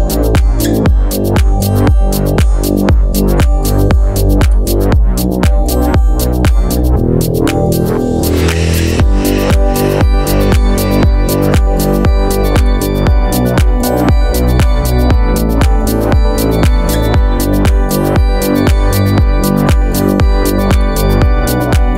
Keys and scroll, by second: 2.6 super+c, 4.8 1, 5.0 Return, 5.6 Up, 6.2 Down, 6.4 Up, 10.5 Up, 13.3 Down, 13.8 Left, 13.9 Down, 14.5 super+s, 18.0 super+z.